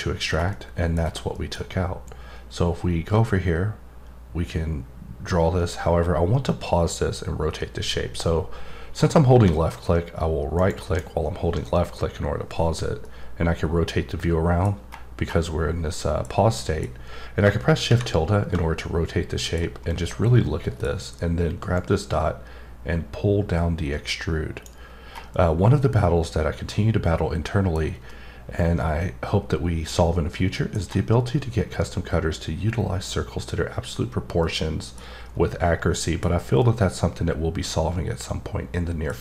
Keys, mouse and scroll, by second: 0.2 scroll down 1, 0.5 middle click, 1.3 middle click, 2.0-10.6 drag, 10.6 right click, 13.0-14.8 middle drag, 14.8-15.9 scroll up 3, 15.9 middle click, 16.5 middle click, 18.7 middle click, 19.9 middle click, 21.7-24.8 drag, 25.3 middle click, 28.1 middle click, 34.4 middle click, 35.2 scroll down 1, 35.5 middle click, 36.3 scroll down 1, 36.6-39.1 middle drag.